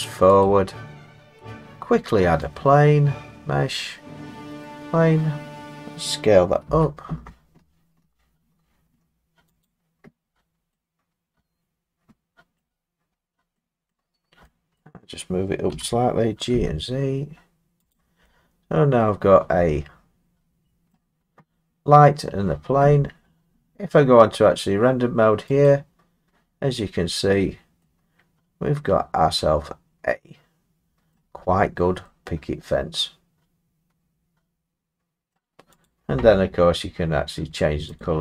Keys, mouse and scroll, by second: 0.4 click, 2.5 click, 4.6 click, 6.7 s, 9.6 click, 10.3-10.6 scroll down 3, 10.6-11.4 scroll down 2, 12.6-13.4 scroll down 4, 13.9 middle click, 14.8 middle click, 15.7 g, 16.5 z, 17.9 click, 20.9 middle click, 25.7 click, 27.3 middle click, 27.3 middle click, 31.1-32.0 scroll, 33.0 scroll, 35.3-35.8 scroll, 35.9 click, 38.0 click.